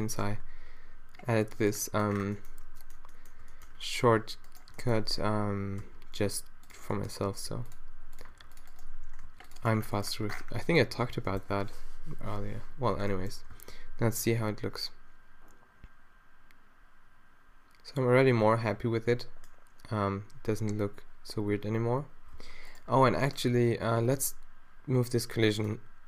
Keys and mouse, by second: 0.0 a, 0.2 ctrl+r, 2.2 a, 5.3-6.7 middle drag, 5.8 d, 7.3 ctrl+r, 8.3 ctrl+r, 9.3 ctrl+r, 9.8 middle click, 10.3 a, 11.2 Tab, 12.2 shift+Left, 13.5 alt+a, 22.8 alt+a, 23.0-25.6 middle drag, 25.6 click.